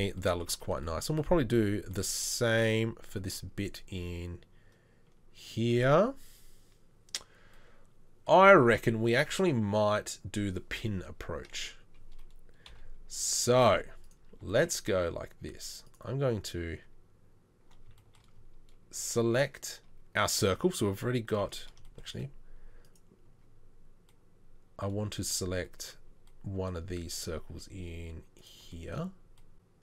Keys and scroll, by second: 12.7 KP_3, 13.7 z, 16.8 Tab, 25.0 z.